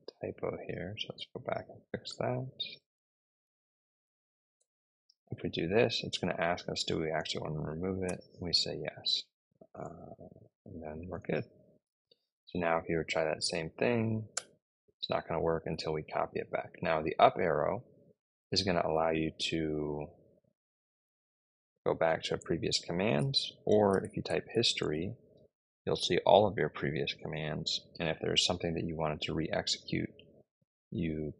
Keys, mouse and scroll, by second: 0.8 Left, 0.8 Left, 0.9 Left, 1.0 Left, 2.6-4.6 typing, 7.9 y, 9.7 Return, 12.4 Up, 13.6 Up, 14.2 Return, 15.4 Up, 15.6 Up, 15.7 Up, 16.9 Down, 17.3 Up, 18.1 Up, 18.8 Up, 22.1 Return, 23.3-24.6 typing, 24.7 Return.